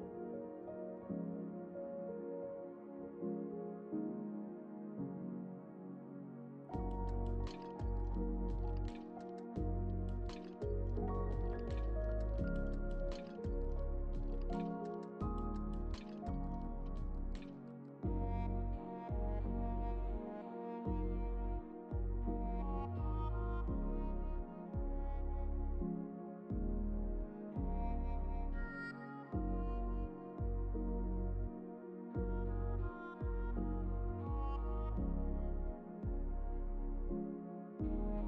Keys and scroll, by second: 3.6 ctrl+alt+r, 12.2 ctrl+j, 21.6 ctrl+t.